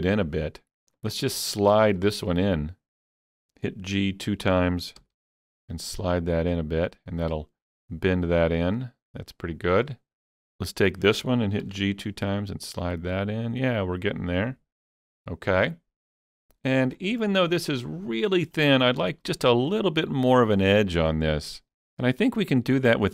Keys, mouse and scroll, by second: 2.0-3.8 middle drag, 5.0 alt+click, 5.0-7.4 middle drag, 5.0 g, 5.3 g, 10.2 middle click, 10.2 click, 10.2 g, 10.5 click, 11.7 g, 11.8 g, 14.8 alt+click, 15.6-17.1 middle drag, 17.0 scroll up 3, 17.3 shift+middle click, 17.8-18.6 scroll up 1, 18.6-18.9 scroll up 3, 19.0 shift+middle click, 19.5-21.9 shift+middle drag.